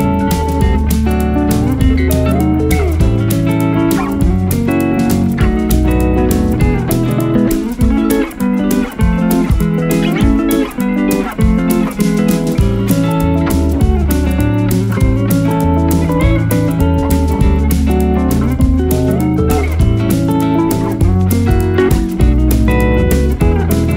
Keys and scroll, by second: 0.7 F3, 13.9 F2, 15.3 KP_Add, 15.9 F3, 17.4 ctrl+z, 20.7 1, 20.9 2, 21.2 Return.